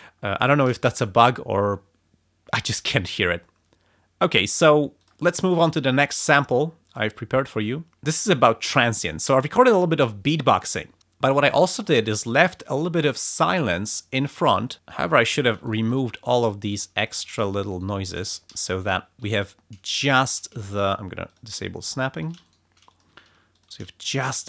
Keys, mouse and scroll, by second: 5.0 click, 6.9 click, 7.3 scroll down 2, 7.9 f, 9.3 click, 14.8 space, 14.8 click, 14.9 s, 15.2 click, 15.7 shift+right click, 16.3 shift+click, 16.7 s, 17.0 click, 17.7 shift+right click, 18.5 ctrl+shift+z, 18.8 ctrl+click, 19.2 ctrl+s, 20.1 ctrl+z, 21.3 click, 21.9 click, 22.2 s, 22.4 shift+right click, 22.9 shift+click, 23.3 shift+s, 23.5 shift+click, 24.0 shift+right click.